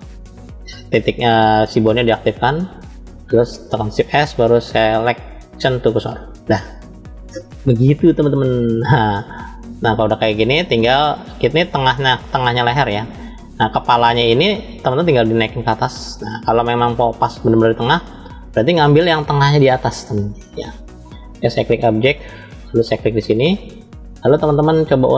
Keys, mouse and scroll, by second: 0.4 click, 1.7-2.5 scroll down 3, 2.6 shift+middle click, 3.8 shift+s, 7.5-10.6 middle drag, 11.3-13.4 middle drag, 14.1 click, 15.3 click, 17.9 middle click, 18.8 shift+middle click, 19.7-20.9 scroll up 2, 21.3-22.1 drag, 22.9 click, 23.6 scroll up 1, 23.7-24.7 middle drag.